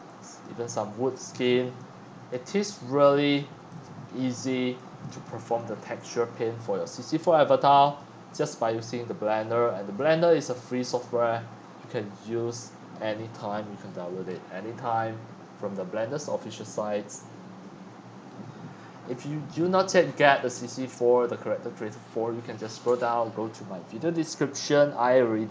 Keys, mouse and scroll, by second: 0.7-1.1 scroll down 7, 1.1-1.7 scroll up 14, 2.2-3.5 typing, 2.4 click, 2.5 middle click, 2.5 scroll, 3.7 click, 4.1-4.6 scroll down 7, 4.4 click, 4.6 x, 5.1 click, 5.5 click, 8.0 click, 8.8 scroll down 6, 9.4 middle click, 9.5 scroll up 5, 10.8 shift+middle click, 14.7 middle click, 19.1-19.6 scroll up 2, 20.1-20.4 scroll up 2, 20.5-25.5 drag.